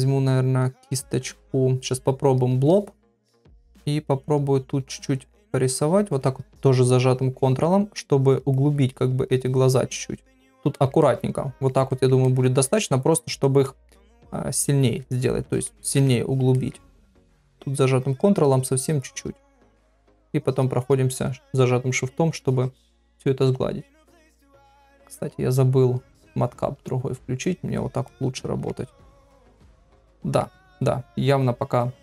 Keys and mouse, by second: 2.4 click, 4.5 ctrl+click, 5.1 ctrl+click, 5.3 ctrl+click, 5.6 ctrl+click, 5.8 ctrl+click, 6.2 ctrl+click, 6.4 ctrl+click, 6.9 ctrl+click, 7.4 ctrl+click, 8.0 ctrl+click, 8.5 ctrl+click, 8.7 ctrl+click, 9.3 ctrl+click, 9.4 ctrl+click, 9.6 ctrl+click, 9.9 ctrl+click, 10.1 ctrl+click, 10.7 ctrl+middle click, 11.0 middle click, 11.9 ctrl+middle click, 12.2 middle click, 13.7 middle click, 15.0 KP_Divide, 15.7 middle click, 16.5 middle click, 17.1 click, 17.5 click, 18.0 click, 18.4 ctrl+click, 19.0 ctrl+click, 19.4 ctrl+click, 19.8 shift+click, 20.1 shift+click, 20.5 shift+click, 20.8 shift+click, 21.5 middle click, 22.4 shift+click, 23.4 KP_Divide, 24.2 ctrl+middle click, 25.2-27.7 drag, 28.1 middle click, 29.1 shift+click, 29.7 middle click, 30.8 middle click.